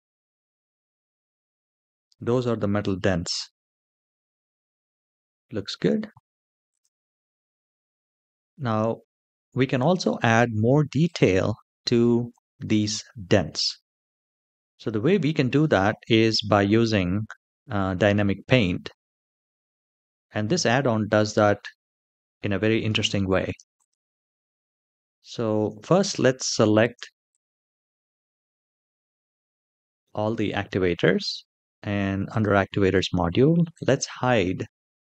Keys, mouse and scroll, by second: 2.1-2.9 middle drag, 3.3-5.0 middle drag, 5.2 space, 6.4 click, 7.1-7.5 scroll down 3, 7.8 shift+middle click, 8.5 middle click, 9.1-9.4 shift+middle drag, 10.8-12.1 drag, 12.6-13.8 scroll up 2, 13.8-15.8 scroll up 1, 23.5 click, 24.3-24.9 scroll down 3, 24.9-25.3 shift+middle drag, 25.6 middle drag, 26.1-26.6 shift+middle drag, 27.0 click, 29.7 middle click, 32.1 click, 33.5-35.1 drag.